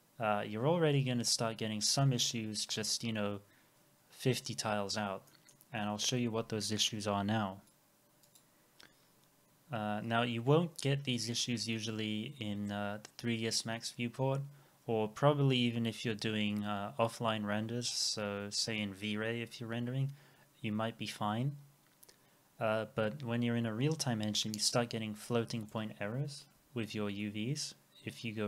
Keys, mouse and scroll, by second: 1.9-2.2 scroll down 1, 4.8 scroll down 1, 5.3 middle click, 25.7 right click, 26.6 w.